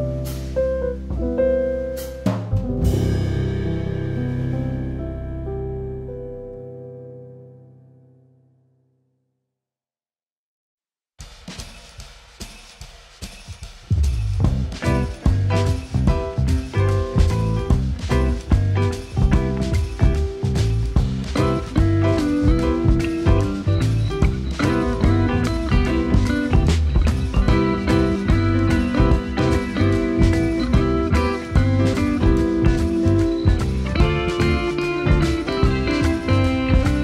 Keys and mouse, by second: 0.0 KP_1, 0.5 g, 0.7 z, 1.8 z, 3.8 click, 4.2 click, 5.0 click, 5.6 ctrl+s, 6.1 click, 6.6-8.5 middle drag, 9.2 s, 9.8 click, 10.4 KP_1, 11.3 s, 14.0 click, 14.7 click, 17.3 middle click, 18.1 Tab, 19.6 click, 20.1 alt+middle click, 21.6 shift+middle click, 22.1 2, 22.5 click, 22.6 click, 23.0 ctrl+b, 26.9 r, 28.1 ctrl+r, 29.4 click, 29.9 ctrl+r, 33.9 click, 34.2 middle click, 35.1 click, 35.2 click, 35.7 ctrl+b, 36.9 Tab.